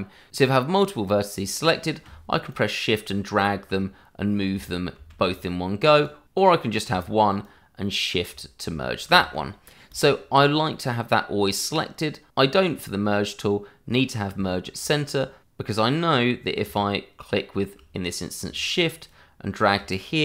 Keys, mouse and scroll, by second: 2.5 shift+click, 2.6 click, 4.9 ctrl+z, 5.9 click, 7.4 click, 9.0 ctrl+z, 9.9 click, 12.5 click, 13.9-14.3 scroll up 1, 14.4 shift+middle click, 14.6 middle click, 15.4 click, 19.0 shift+click, 19.5 click.